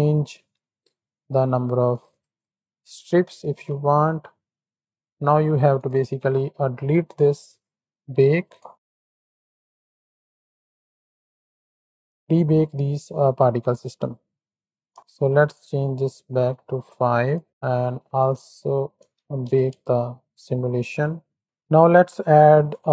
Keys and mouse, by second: 0.4 click, 1.0 click, 1.8 click, 2.3-3.0 drag, 3.4 shift+Right, 3.5 shift+Left, 4.6 click, 5.0 click, 5.9 Tab, 6.7 click, 8.7 shift+Right, 8.7 shift+Left, 9.7 z, 10.3 space, 14.9 Tab, 14.9 space, 16.0 click, 16.3 click, 17.2 click, 18.2 click, 18.4 Tab, 19.3 shift+Right, 19.4 shift+Left, 19.7 space, 21.7 ctrl+s, 22.2 click.